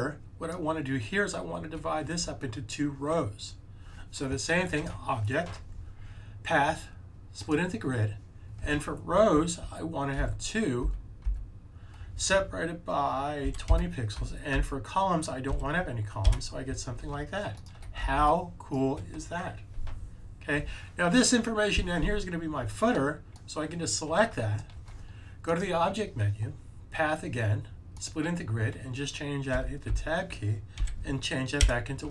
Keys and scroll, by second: 10.1 2, 13.5 typing, 15.2-15.9 typing, 20.0-20.7 typing, 30.8 1.